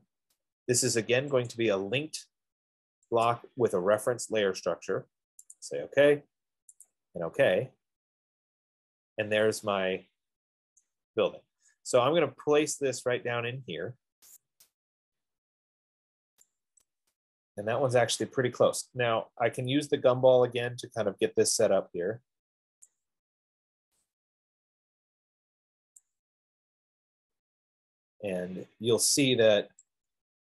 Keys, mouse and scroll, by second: 2.0 click, 3.7 click, 4.5 F15, 5.9 click, 7.3 click, 9.5 middle click, 11.1 right click, 12.2 middle click, 12.3 middle click, 12.9 middle click, 14.8 click, 18.4 right click, 23.1 click, 26.2 click, 26.8-27.1 scroll, 27.6 middle click.